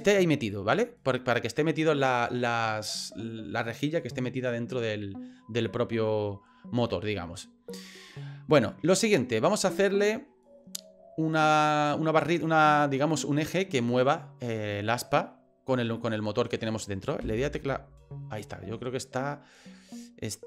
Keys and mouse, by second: 0.5 middle click, 1.2-5.4 middle drag, 5.7-8.0 middle drag, 9.2 middle click, 9.4 click, 11.5 click, 16.1 click, 17.2 KP_1.